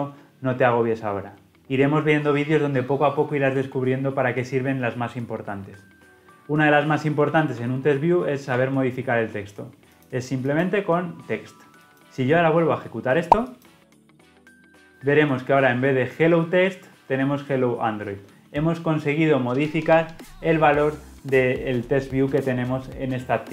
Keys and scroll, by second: 8.4 Tab, 13.6 shift+F10.